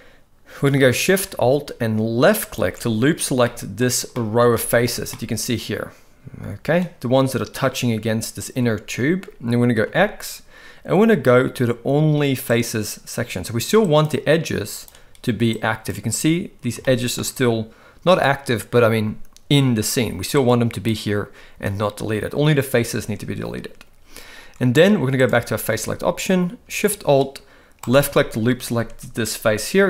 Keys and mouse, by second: 2.5 alt+shift+click, 3.4-3.8 middle drag, 4.2 middle click, 4.6-4.9 shift+middle drag, 5.1-6.8 middle drag, 9.9 x, 13.8 click, 14.8 click, 15.6 click, 16.8 shift+middle click, 20.4 click, 25.7 alt+a, 27.9 alt+shift+click.